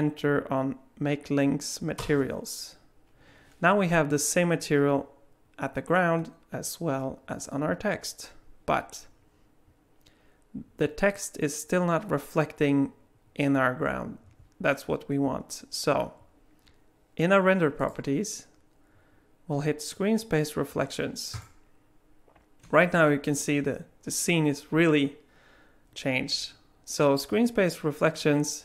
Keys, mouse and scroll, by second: 17.8 click, 21.3 click.